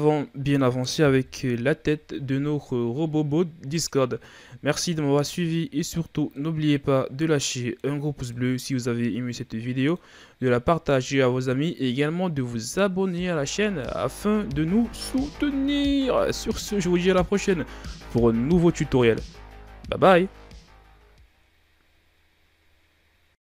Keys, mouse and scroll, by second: 1.0 KP_1, 4.5-5.4 shift+scroll down 4, 5.4-6.2 shift+scroll up 5, 6.2-11.3 middle drag, 12.0-14.6 middle drag, 14.6 KP_1, 18.4-19.6 shift+scroll down 3, 19.6-20.3 shift+scroll up 3.